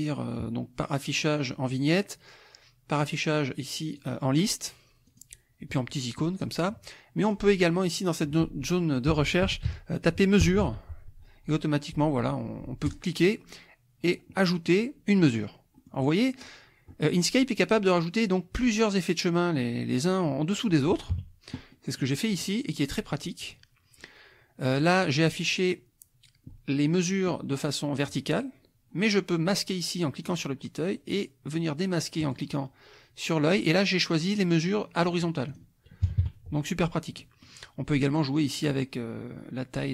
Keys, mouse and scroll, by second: 3.0 click, 4.0 click, 5.0 click, 7.2 click, 8.8-11.1 typing, 12.9 click, 15.2 middle click, 15.2-16.6 scroll down 3, 15.7-16.8 middle drag, 16.9 click, 20.5 click, 21.1 KP_Subtract, 21.7 click, 22.3 click, 22.9 click, 24.9 click, 30.2 click, 32.2 click, 35.5 click, 36.0 KP_Subtract, 37.2 click, 38.6 click.